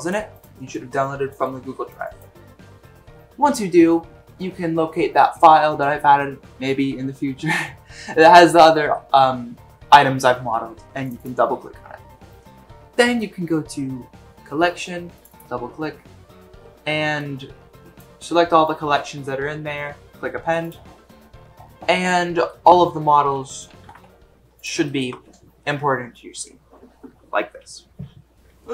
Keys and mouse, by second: 22.0-22.4 middle drag, 23.8 g, 24.8 shift+middle drag, 27.6-28.7 drag, 27.6-28.7 middle drag, 27.6-28.7 right drag.